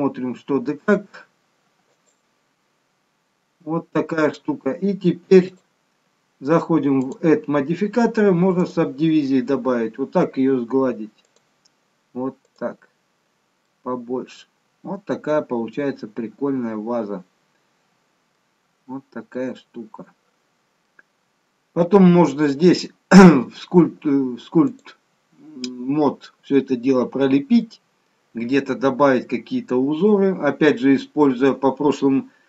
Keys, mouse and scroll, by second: 0.5 Tab, 1.9 click, 3.1-3.4 scroll up 1, 3.6-4.9 scroll down 1, 5.4 click, 7.1 click, 11.2 click, 12.5 click, 13.6 middle click, 18.7-19.1 scroll up 3, 19.4 middle click, 21.1-21.9 scroll down 2, 21.9 middle click, 24.7 click, 26.7-27.6 scroll down 2, 27.6 middle click.